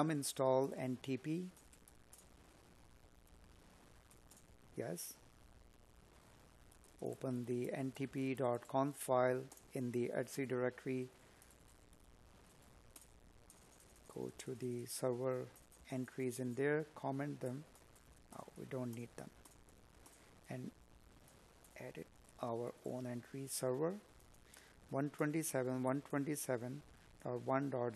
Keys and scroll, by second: 4.9 Up, 7.6 Escape, 13.6 space, 17.5 space, 19.3 space, 27.2 space.